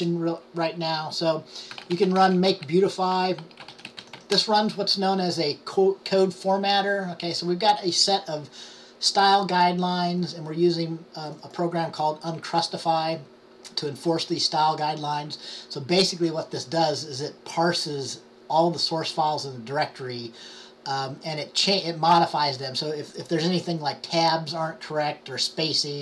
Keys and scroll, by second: 3.8-4.3 typing.